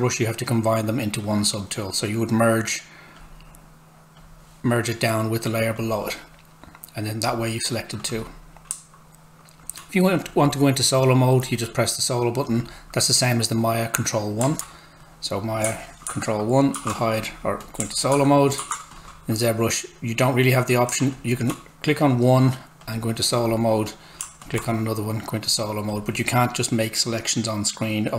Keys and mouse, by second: 3.2 click, 14.6 alt+Tab, 16.0 ctrl+1, 17.2 click, 18.1 ctrl+1, 18.9 click, 19.0 alt+Tab, 21.1 alt+click.